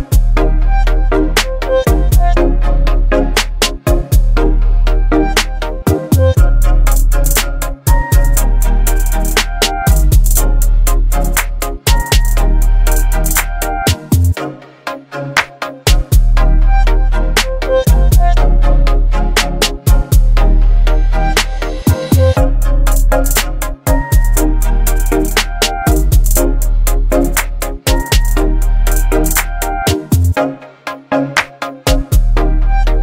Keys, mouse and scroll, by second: 3.0-4.8 drag, 7.0 right click, 7.7 click, 10.9 click, 16.3 ctrl+c, 18.0-19.7 drag, 20.6 ctrl+v, 21.4 Return, 23.1 click, 24.7 click, 28.0 alt+scroll up 1, 30.6 v, 31.3 ctrl+0.